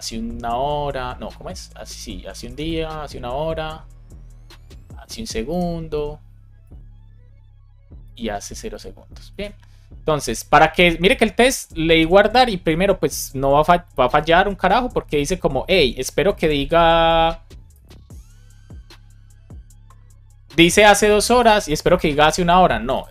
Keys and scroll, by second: 2.4 BackSpace, 5.4 BackSpace, 8.4 BackSpace, 9.2 super+s.